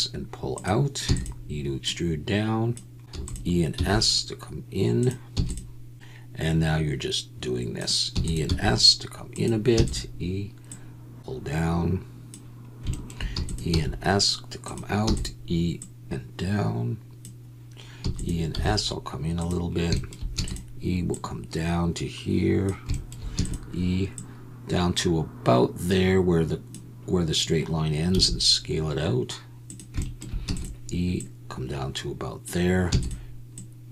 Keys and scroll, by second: 1.0 e, 3.1 e, 3.7 s, 5.3 e, 8.1 e, 8.5 s, 9.7 e, 13.3 e, 13.7 s, 15.0 e, 18.0 e, 18.5 s, 20.3 e, 28.1 s, 30.4 e, 32.9 e.